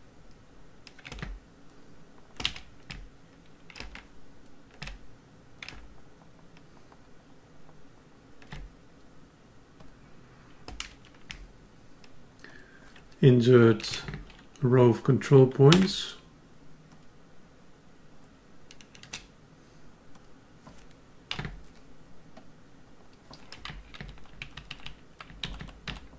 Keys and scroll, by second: 0.0 alt+Up, 21.3 F10, 24.0 alt+Right, 25.4 alt+Down.